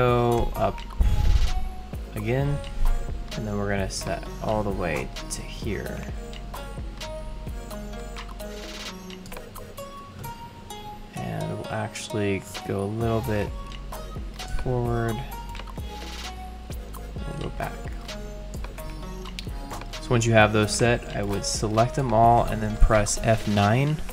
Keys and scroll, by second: 0.4 shift+super+Right.